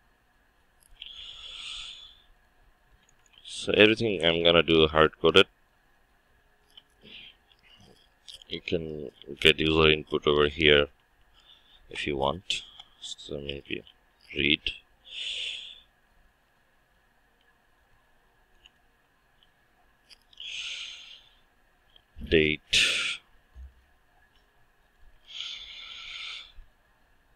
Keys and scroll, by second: 1.6 ctrl+c, 3.6 ctrl+v, 17.4 ctrl+c, 19.3 ctrl+v, 24.2 ctrl+c, 25.3 ctrl+v.